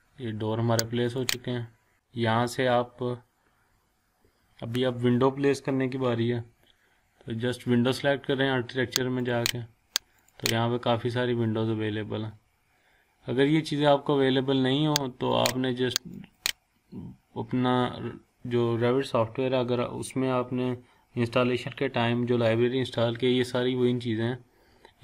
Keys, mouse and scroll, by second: 1.7 scroll down 1, 1.9-2.2 scroll up 1, 3.6 scroll down 1, 9.2 click, 11.6-13.6 scroll down 1, 15.3 click, 15.7 click.